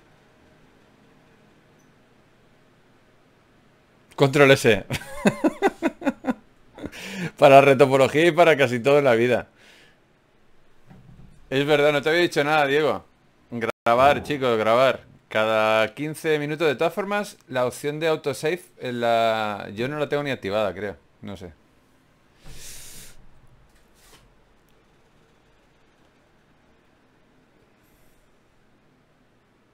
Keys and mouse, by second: 2.1 ctrl+s, 8.1 Tab, 11.8 click, 12.8-13.9 right drag, 13.5 g, 16.3 ctrl+Tab, 17.2 right click, 18.0 f, 24.0 right click.